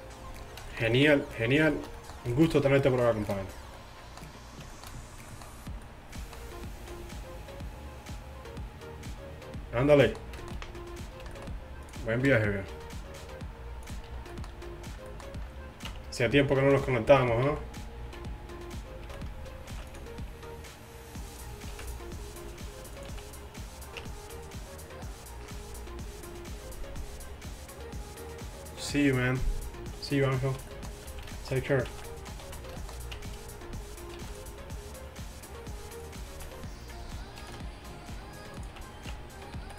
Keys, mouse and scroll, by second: 0.4-2.9 middle drag, 3.0-4.1 middle drag, 4.8-5.5 middle drag, 5.9-8.3 middle drag, 9.4-10.2 middle drag, 10.2-11.4 middle drag, 11.4 middle drag, 12.0-13.9 right drag, 12.7 t, 13.9 drag, 14.1 t, 14.5 middle click, 15.9 Tab, 16.6 z, 17.1 z, 17.5 z, 18.0 z, 19.1 z, 19.8 ctrl+r, 21.8 ctrl+r, 23.1 z, 24.1 Tab, 30.5 z, 31.1 z, 32.0 z, 32.5 z, 33.2 Tab, 34.2 ctrl+r, 36.4 z, 37.6 ctrl+r, 38.8 z, 39.2 Tab.